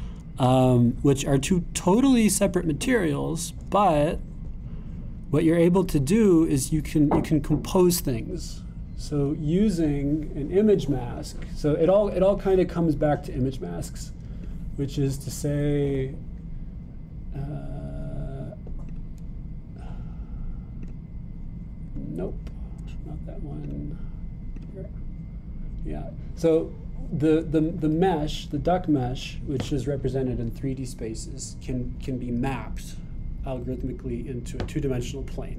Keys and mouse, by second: 5.2 click, 6.4 middle click, 7.4-8.6 middle drag, 12.4-15.4 drag, 16.9-24.8 drag.